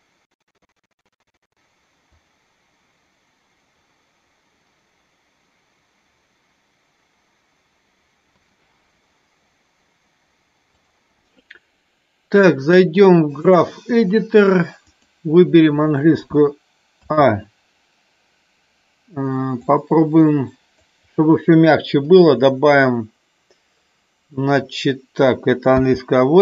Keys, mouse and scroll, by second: 2.1 click, 8.2 space, 14.9 click, 17.0 a, 19.9 click, 21.9 right click.